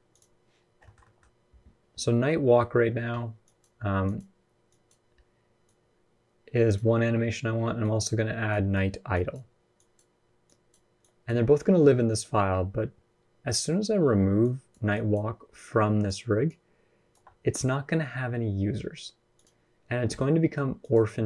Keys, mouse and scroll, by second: 0.6 shift+middle click, 0.8 middle click, 2.9-5.4 typing, 3.2 click, 3.8 click, 4.4 click, 5.4 click, 6.5-16.9 typing, 7.8 click, 8.3 click, 8.9 click, 9.5 click, 10.2 click, 10.8 click, 14.2 click, 14.9 click, 15.3 click, 16.2 click, 19.1 click, 20.6 click.